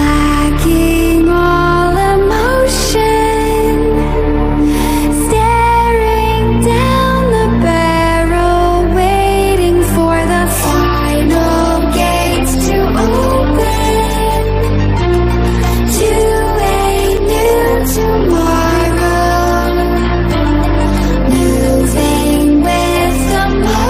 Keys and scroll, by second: 10.8 ctrl+-.